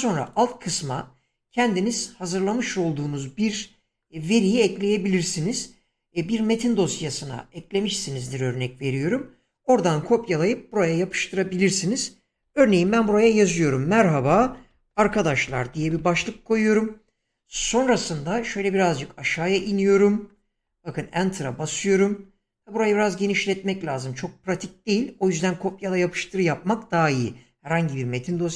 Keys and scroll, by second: 12.4 Caps_Lock, 12.6-16.7 typing, 18.7 typing, 20.6 Return.